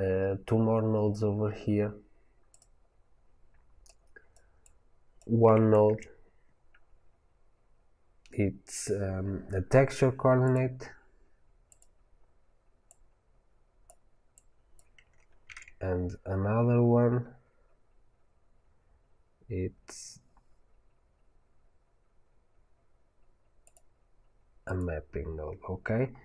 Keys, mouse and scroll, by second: 1.0-1.3 scroll down 1, 1.7-2.5 scroll up 1, 2.5 click, 4.5 click, 12.7-14.3 drag.